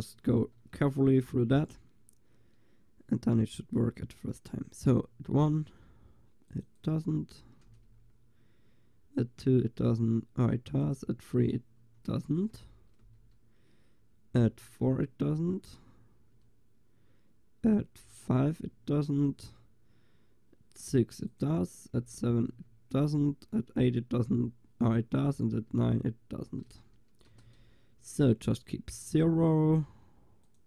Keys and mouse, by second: 3.1-5.8 middle drag, 6.5-11.1 drag, 7.9 BackSpace, 12.6 BackSpace, 15.8 Delete, 18.3 Delete, 22.3 Delete, 30.5-30.6 drag.